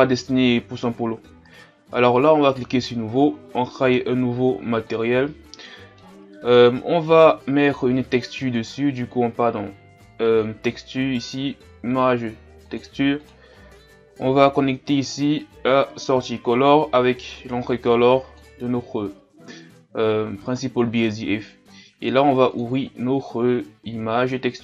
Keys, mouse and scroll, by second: 1.0-2.7 scroll down 1, 2.7-22.9 drag.